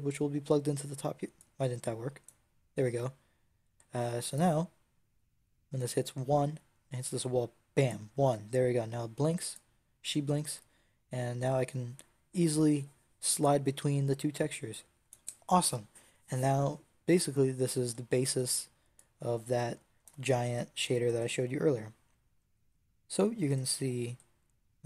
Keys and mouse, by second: 1.2 click, 4.2-7.0 middle drag, 9.4-11.4 drag, 19.9 click.